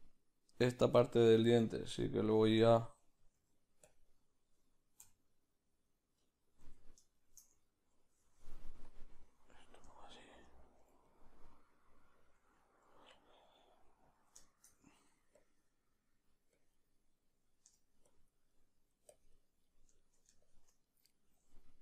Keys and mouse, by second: 0.0 middle click, 0.6 click, 1.1 click, 1.3-2.3 ctrl+middle drag, 2.3 click, 2.7-8.9 ctrl+middle drag, 7.1 t, 8.9-10.0 drag, 10.0-15.4 shift+middle drag, 15.4 click, 15.9-21.8 drag, 18.5 middle click, 19.6 middle click, 20.8-21.8 middle drag.